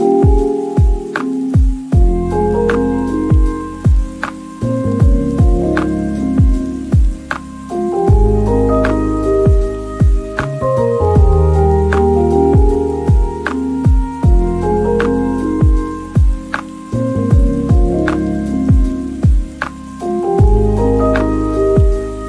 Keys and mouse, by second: 0.0-2.4 typing, 0.0 Tab, 0.0 shift+middle click, 1.4 drag, 2.1 middle click, 2.4 drag, 7.1-7.8 typing, 7.6 middle click, 7.9 middle click, 8.3 ctrl+s, 8.7 shift+middle click, 11.2 shift+middle click, 14.6 shift+middle click, 15.0 Tab, 15.0-17.1 typing, 15.3 Tab, 15.8 middle click, 17.3 drag, 17.5 middle drag, 18.2 click, 18.2-19.6 typing, 18.6 click, 19.1 click, 19.9 click, 20.1 ctrl+s.